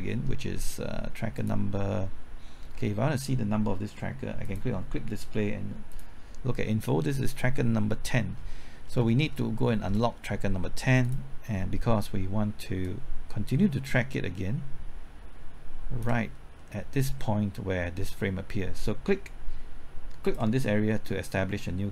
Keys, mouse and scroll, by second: 1.4 click, 8.3 scroll up 1, 8.9 scroll down 1, 9.3 middle click, 11.0-16.0 drag, 16.6-18.0 middle drag, 20.2 click.